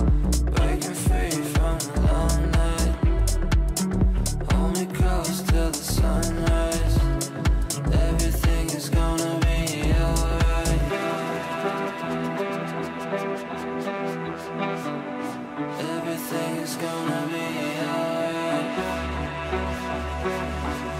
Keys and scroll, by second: 7.3 Up.